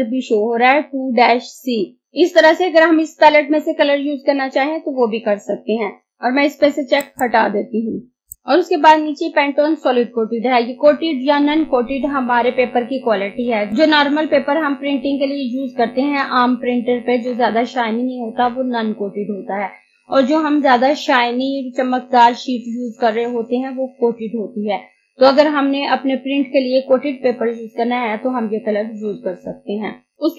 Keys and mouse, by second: 6.0 click, 6.9 click.